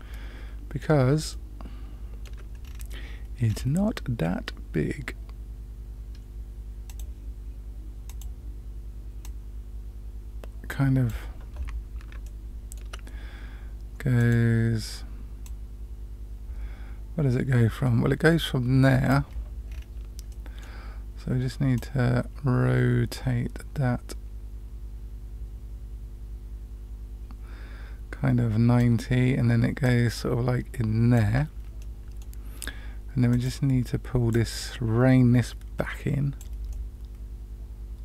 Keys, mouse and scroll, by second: 1.3-2.2 shift+middle drag, 2.6-3.1 scroll down 2, 3.4 scroll down 1, 3.6 scroll down 1, 6.9 click, 8.0 click, 9.2-11.0 drag, 12.2 shift+middle click, 14.1 click, 15.4-19.1 drag, 19.6 scroll up 1, 20.2 middle click, 21.7-28.8 drag, 29.8-31.2 drag, 31.7 middle click, 33.3 click, 34.3-36.4 drag, 36.7-38.0 middle drag.